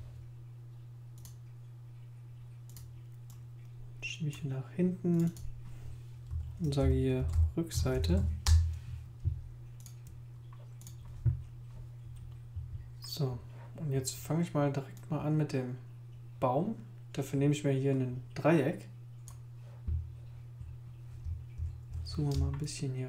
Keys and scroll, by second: 6.1-8.7 typing, 21.6 super++, 22.3 super+space.